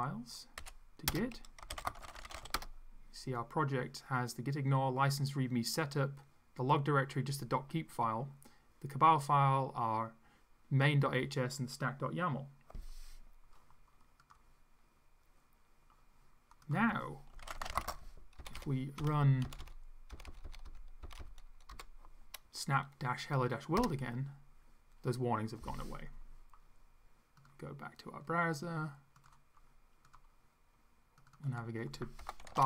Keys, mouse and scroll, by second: 0.6-3.0 typing, 1.1 Return, 16.7 click, 17.1-18.4 typing, 18.4 Up, 19.5 Up, 20.2 Up, 21.1 Up, 21.7 Down, 23.8 Return, 27.4 click, 29.2 click, 30.1 click, 31.2 click, 32.0-32.6 typing.